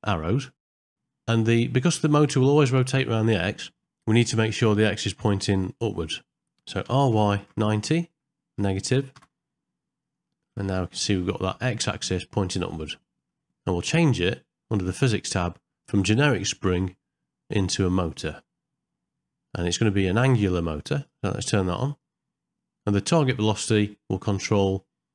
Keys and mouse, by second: 0.7 middle click, 1.0 ctrl+middle click, 1.6 shift+middle click, 10.3 ctrl+middle click, 10.8 shift+middle click, 11.1 middle click, 13.1 middle click, 16.5-18.2 drag.